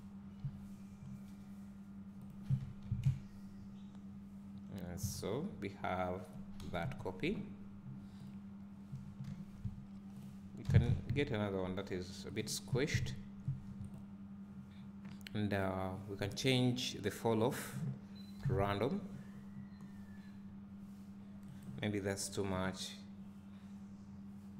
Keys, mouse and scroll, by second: 0.4 g, 2.6 Tab, 3.0 `, 5.1 scroll down 1, 6.8 KP_1, 8.3 click, 9.2 shift+d, 12.8 Tab, 13.0 scroll up 1, 13.9 click, 17.6-21.6 drag, 18.5 g, 21.6 right click.